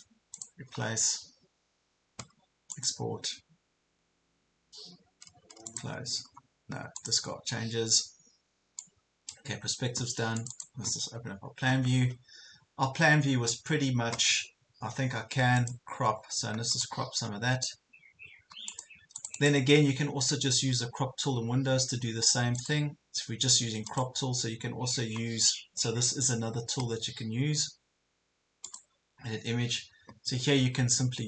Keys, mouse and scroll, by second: 17.1 right click, 18.7-31.2 drag.